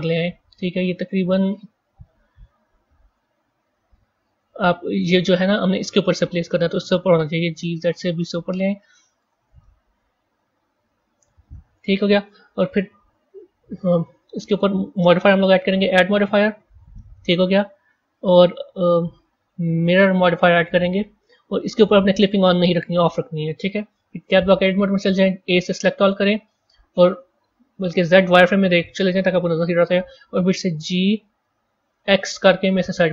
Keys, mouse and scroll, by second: 1.9 KP_3, 2.9-3.6 scroll up 3, 3.6 scroll down 1, 3.7 scroll up 1, 4.3-6.5 scroll up 1, 7.1 g, 9.5-12.1 middle drag, 12.1 KP_1, 14.8 click, 16.1-19.2 drag, 24.1 Tab, 25.4 a, 25.6 a, 27.9 z, 30.6 g.